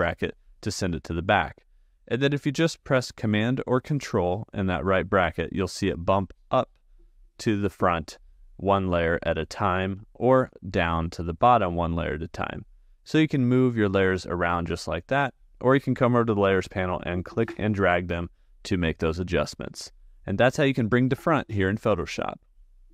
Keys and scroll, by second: 6.0 super+], 10.3 super+[, 11.9 super+].